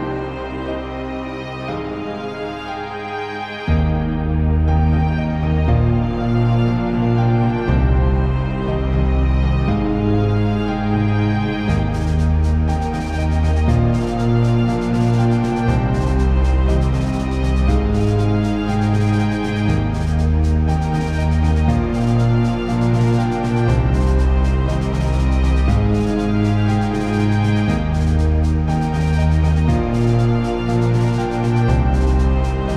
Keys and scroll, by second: 10.7 ctrl+z.